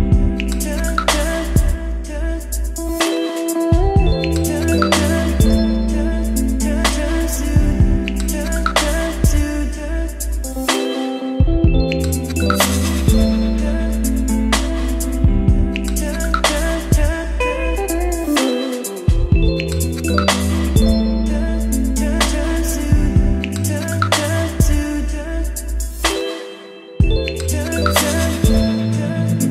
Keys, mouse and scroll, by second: 0.0-2.9 typing, 1.1 Return, 4.5-7.3 typing, 5.3 Return, 6.8 Return, 10.7-12.8 drag, 13.8 click, 14.4 Return, 16.6 Return, 18.3-21.8 typing, 22.8-24.0 typing, 25.4 space, 26.7-29.5 drag.